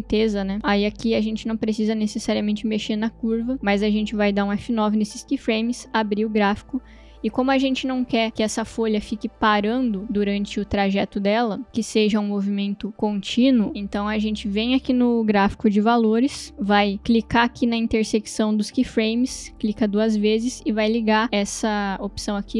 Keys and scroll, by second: 4.2 F9, 5.7 shift+F3, 10.0 space, 16.5 space.